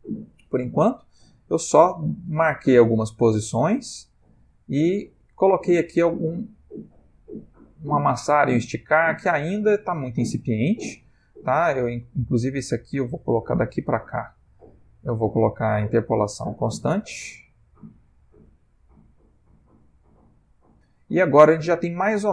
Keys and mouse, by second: 1.0 click, 14.1 click, 15.0 click, 15.7 t, 17.4 click, 21.4 space.